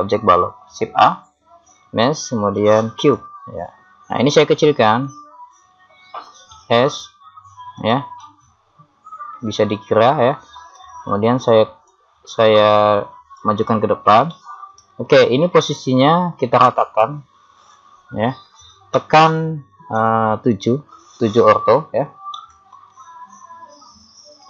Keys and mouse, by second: 1.0 shift+a, 4.4 click, 5.3 middle click, 6.6 s, 8.2-9.4 middle drag, 11.9 click, 14.3-15.3 middle drag, 16.2-19.9 middle drag, 19.9 KP_7.